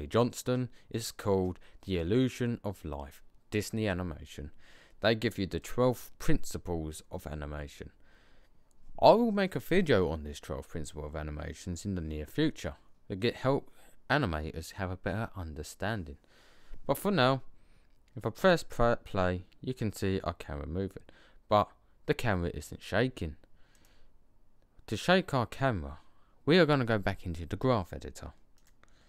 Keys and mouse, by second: 5.6 click, 18.3 click, 23.7-24.1 drag, 24.8 click, 28.4 click.